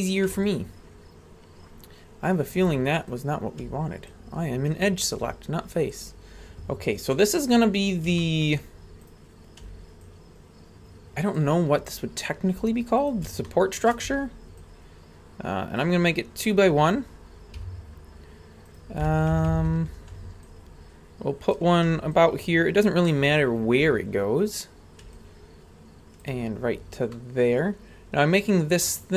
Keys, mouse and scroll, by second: 0.5-2.6 ctrl+drag, 3.1 right click, 4.1-5.2 ctrl+drag, 5.9 click, 6.8-7.1 scroll down 1, 7.1-7.6 middle drag, 7.8 scroll down 1, 8.2 shift+middle drag, 9.1 right click, 10.1-11.5 ctrl+drag, 12.4 scroll down 2, 13.0 right click, 13.5 shift+middle click, 14.6-15.9 ctrl+drag, 17.6 a, 18.7 right click, 19.3 ctrl+KP_Add, 19.5 ctrl+KP_Add, 19.7 ctrl+KP_Add, 20.5-21.6 ctrl+drag, 22.1-23.2 ctrl+drag, 23.9-25.1 scroll up 2, 25.2-26.3 ctrl+drag, 27.1-28.8 middle drag.